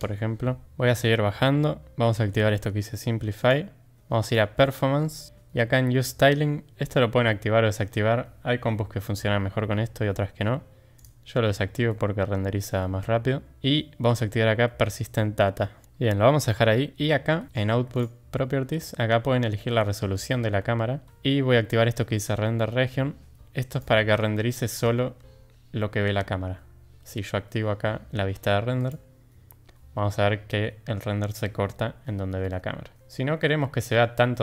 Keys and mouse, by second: 3.4 click, 4.3 click, 11.0 click, 23.7 click, 28.8 click.